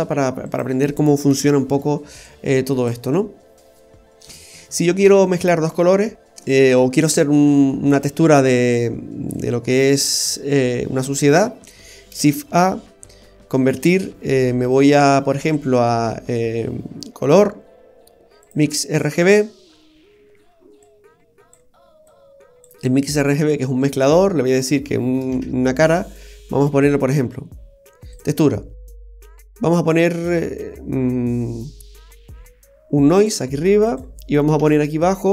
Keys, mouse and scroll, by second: 0.5 click, 1.4 Delete, 2.2 click, 4.6-4.9 scroll down 1, 6.0 middle click, 6.9 middle click, 8.3-9.3 scroll down 3, 9.3 click, 12.1 shift+a, 19.3 typing, 19.5-20.1 scroll up 8, 20.8 click, 22.1 click, 25.3 shift+a, 33.9-34.6 typing.